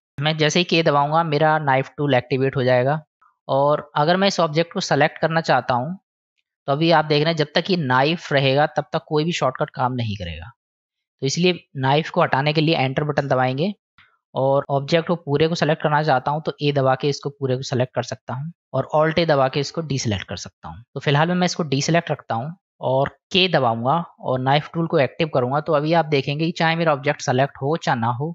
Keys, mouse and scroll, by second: 0.7 k, 3.2-13.8 middle drag, 14.2 middle click, 16.7 a, 18.0 a, 19.7 alt+a, 20.6 middle click, 21.0-21.3 middle drag, 21.9 middle click, 24.4 k, 25.7-28.3 middle drag.